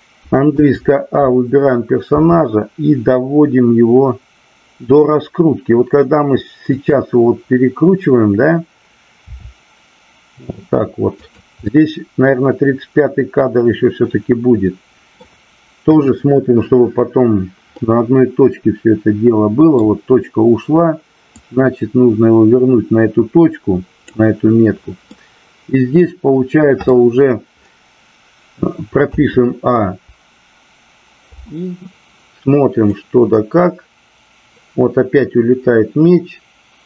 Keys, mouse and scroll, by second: 0.6 a, 2.1 r, 6.8 click, 9.2 r, 11.0 click, 11.7-15.2 middle drag, 15.8 KP_1, 17.7-18.2 scroll up 1, 18.2-18.7 scroll up 1, 18.7-19.8 middle drag, 21.3-24.2 drag, 25.1-27.0 middle drag, 33.0-36.8 drag.